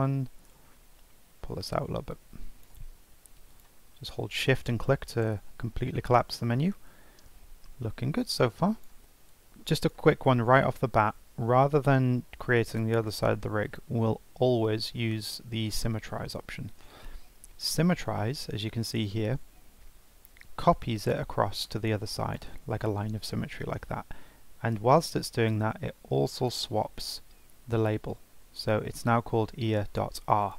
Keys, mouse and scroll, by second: 2.1-3.6 drag, 4.1 scroll down 4, 5.7 scroll up 1, 6.0-7.6 scroll down 1, 7.6-8.2 scroll up 1, 8.2 click, 9.0 shift+middle click, 9.3 click, 10.2 scroll down 3, 10.5 scroll up 1, 11.0 n, 11.7 scroll down 1, 12.0-12.4 scroll up 2, 12.4-13.6 shift+middle drag, 13.6 click, 14.6-17.6 right drag, 26.3 click, 27.3 F2.